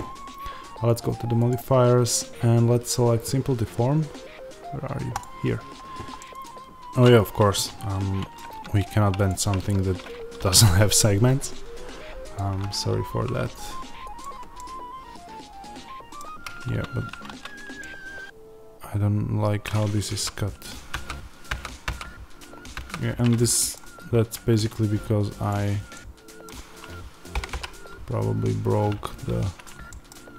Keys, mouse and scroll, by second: 5.1-6.1 drag, 6.1-9.2 middle drag, 6.2 Tab, 9.2 click, 9.5 Tab, 10.3 ctrl+r, 14.5-25.4 middle drag, 16.5 Tab, 20.0 ctrl+z, 23.9-24.3 scroll up 2, 24.3 Tab, 25.4 click, 25.9-29.5 middle drag, 27.2 g, 29.5 click, 29.8-30.3 middle drag.